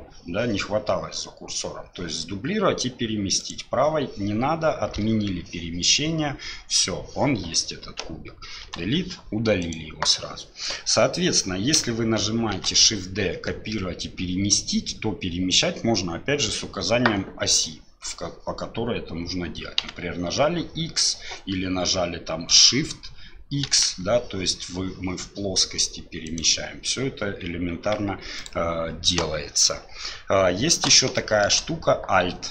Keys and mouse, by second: 8.6 Delete, 9.6 click, 12.5 shift+d, 27.8 g, 31.2 shift+middle drag.